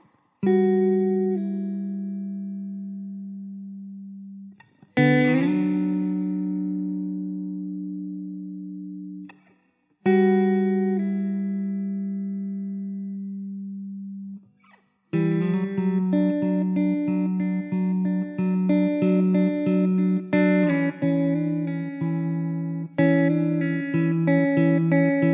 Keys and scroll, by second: 2.6 Tab, 3.8 1, 5.3 l, 5.9 3, 8.5 x, 11.6 x, 12.4 x, 12.6 z, 14.2 x, 14.5 1, 15.0 x, 18.6 3, 19.0 x, 20.8 2, 21.2 x, 22.1 3, 22.7 alt+z, 23.3 x, 24.3 alt+z, 24.7 x.